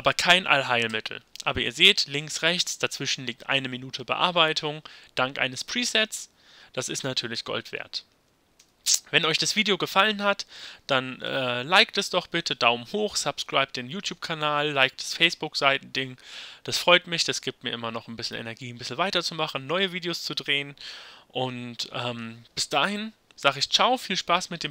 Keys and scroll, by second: 0.9 y, 8.6 Left, 11.3 y.